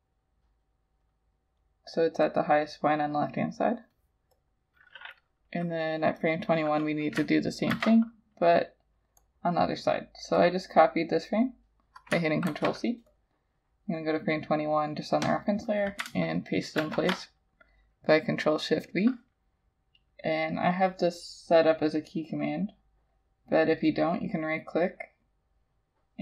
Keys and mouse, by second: 7.8 ctrl+c, 12.5 ctrl+c, 16.8 ctrl+shift+v, 24.0 right click.